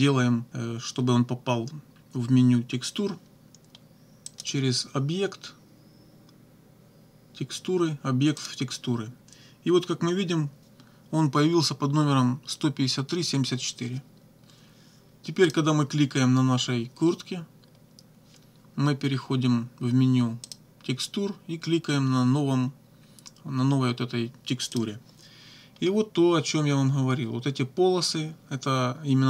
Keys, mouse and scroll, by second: 4.3 click, 8.4 click, 15.5 click, 20.5 click, 24.8 click.